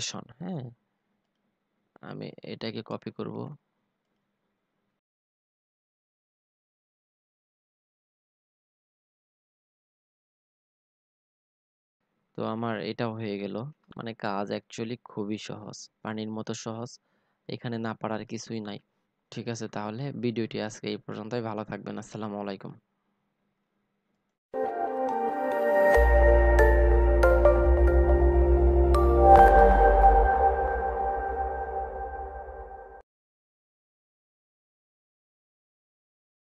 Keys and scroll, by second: 4.3 ctrl+c, 7.1 ctrl+v, 10.5 ctrl+c, 12.0 ctrl+v.